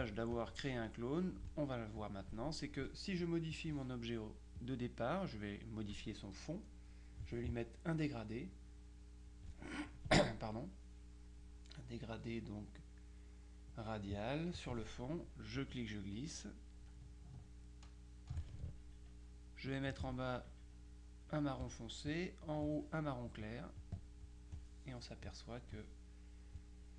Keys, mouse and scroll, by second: 0.5 click, 2.1 click, 3.6 click, 4.7 click, 9.4 click, 13.8 click, 14.7 click, 15.7-18.9 drag, 19.8 click, 21.4 click, 22.6 click, 23.9 click.